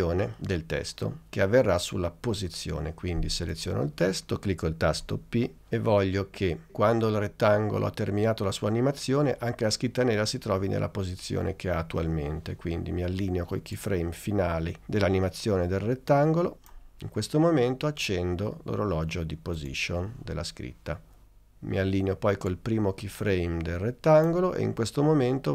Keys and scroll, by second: 5.1 p.